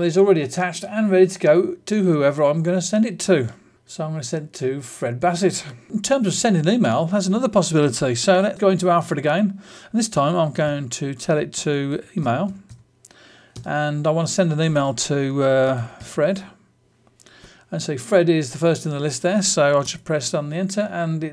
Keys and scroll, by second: 3.6 s, 19.8 Return.